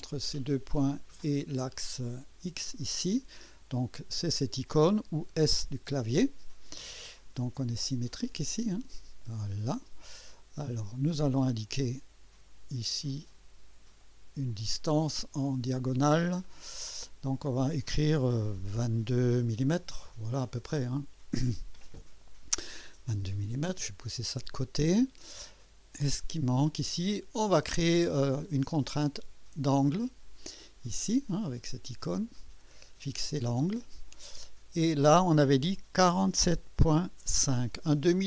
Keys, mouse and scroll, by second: 0.2 click, 2.2 click, 5.5 s, 7.2 scroll down 1, 8.4-10.1 drag, 10.1 scroll up 1, 10.6-11.5 right drag, 13.1 click, 14.5 click, 16.4 click, 19.8 2, 20.6 Return, 23.8-25.4 drag, 28.4 click, 29.8 click, 33.5 click, 36.1 4, 36.4 7, 37.2 ., 37.9 5.